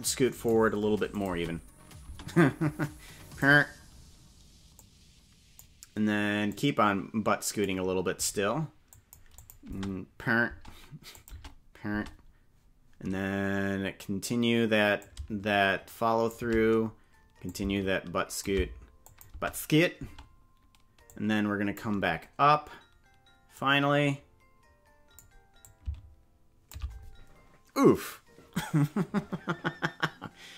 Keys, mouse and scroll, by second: 1.1 click, 1.3 space, 2.1 space, 2.8 click, 4.8 click, 6.5-7.7 drag, 8.9 click, 9.4 click, 9.7 space, 10.5 space, 11.1 click, 11.3 space, 12.1 space, 15.0-16.3 shift+drag, 17.4-18.5 shift+drag, 19.0 click, 19.3 space, 20.1 space, 21.1 click, 23.5-25.2 drag, 25.6-26.7 shift+drag.